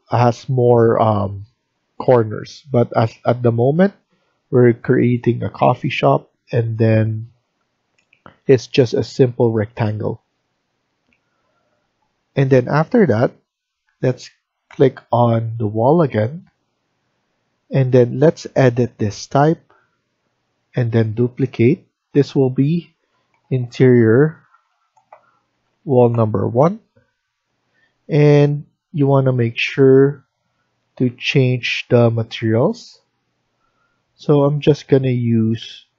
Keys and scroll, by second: 23.0-26.2 typing.